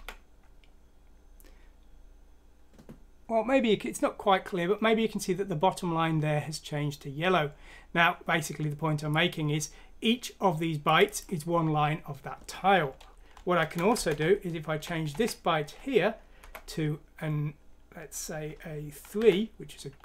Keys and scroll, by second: 13.5 Left, 13.9 Home, 14.7-15.1 Right, 14.7-15.6 typing, 16.4 Right, 17.9-19.1 typing.